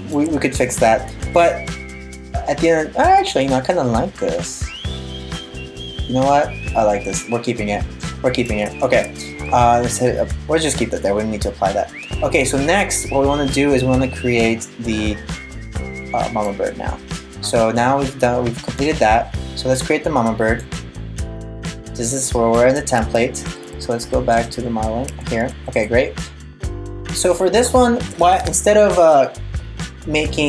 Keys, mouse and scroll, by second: 0.4 middle click, 8.5 super+s, 12.0 click, 13.2 middle click, 18.4 click, 19.3 click, 20.2 click, 21.2 middle click, 22.6 Tab, 23.2 Tab, 24.0 click, 24.7 Tab, 25.0 Tab, 25.4 right click, 26.4 middle click.